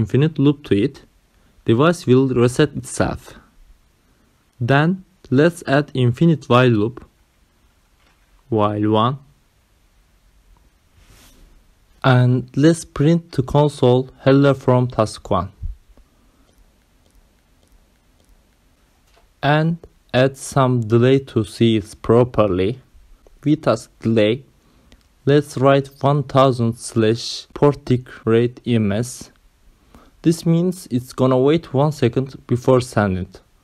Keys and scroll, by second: 1.0 w, 1.7 BackSpace, 6.1-9.8 typing, 8.9 Left, 10.1 Right, 12.0 ctrl+alt+7, 13.1 Return, 14.2 Up, 14.8-20.8 typing, 21.2 Right, 22.9-31.6 typing, 23.1 Return, 32.7 Return.